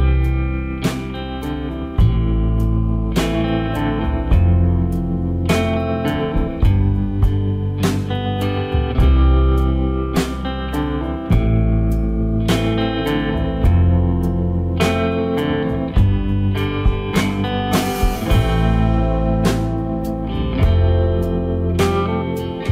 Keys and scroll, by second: 5.1 Return, 5.6 Down, 6.3 Right.